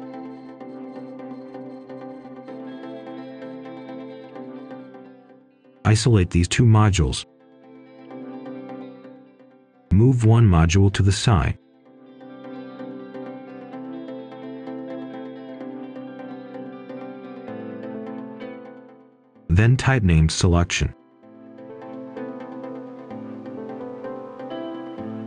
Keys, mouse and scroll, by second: 2.6 right click, 4.7-5.1 scroll up 1, 5.1 click, 6.1 Return, 6.6 Escape, 8.5 click, 8.8 right click, 14.9-16.6 drag, 18.2-19.6 typing, 19.7 Return, 21.3 click, 22.3 right click, 22.8 scroll up 1, 23.1 right click, 23.6-24.1 scroll up 1.